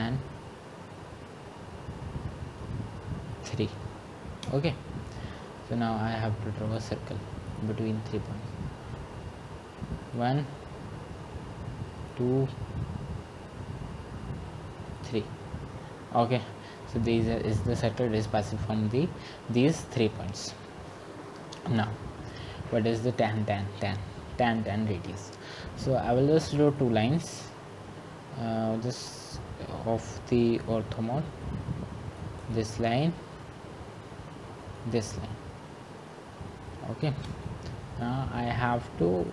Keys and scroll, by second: 4.8 Return.